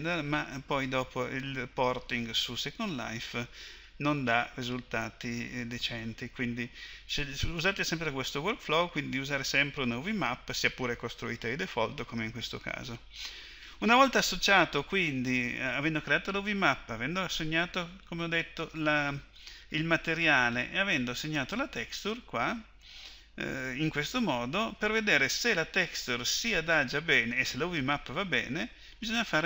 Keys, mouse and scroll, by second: 18.0-24.7 drag.